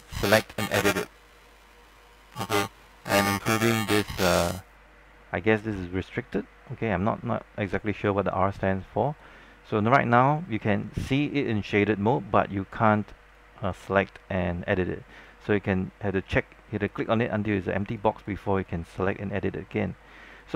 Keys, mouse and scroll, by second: 0.3-0.7 scroll up 1, 0.7-1.6 scroll down 1, 1.6 click.